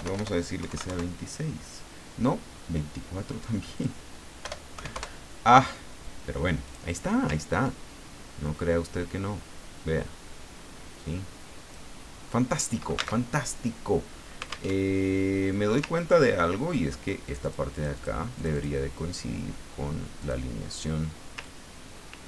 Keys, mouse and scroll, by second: 0.6 KP_2, 0.7 KP_6, 0.9 KP_Enter, 3.7 click, 4.4 BackSpace, 4.7 KP_4, 4.9 KP_Enter, 6.6 click, 8.4-12.0 drag, 13.2 alt+Tab, 14.7 alt+Tab, 16.3-16.6 ctrl+scroll up 2, 17.2 ctrl+click, 18.4 ctrl+click, 20.1 scroll up 2, 20.2 click, 21.4-22.2 ctrl+drag.